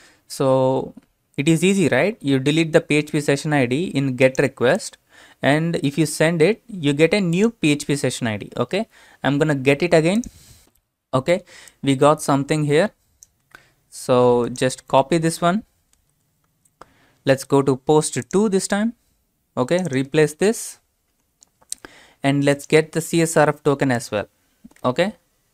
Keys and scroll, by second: 15.9 ctrl+c, 20.4 ctrl+v, 24.8 Return.